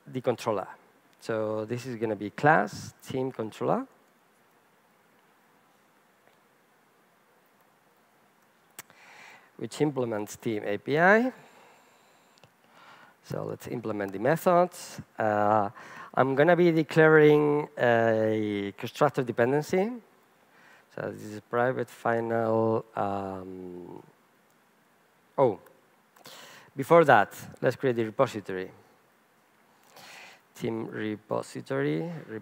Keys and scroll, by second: 9.9 Return, 20.7 Return, 25.6 super+BackSpace, 28.0 super+BackSpace, 28.2 super+n.